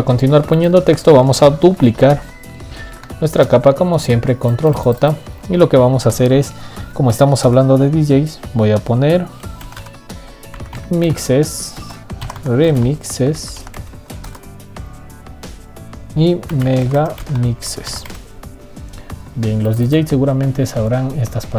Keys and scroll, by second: 0.2 ctrl+z, 3.7 ctrl+j.